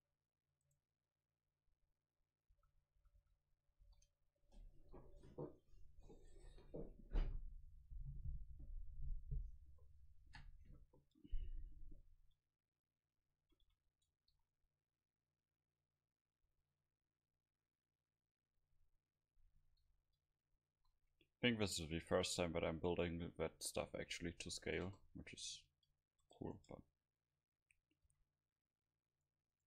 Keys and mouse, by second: 0.0 click, 2.5 a, 3.0 a, 3.2 a, 3.8 ctrl+s, 10.9-12.3 middle drag, 13.4 a, 13.6 a, 14.3 ctrl+s, 20.3 KP_5, 20.7 KP_5, 21.1-24.5 middle drag, 24.8 KP_0, 25.7 Tab, 26.2 Tab, 26.4 right click, 26.7 Tab, 27.3 a, 28.1 c, 28.4 click.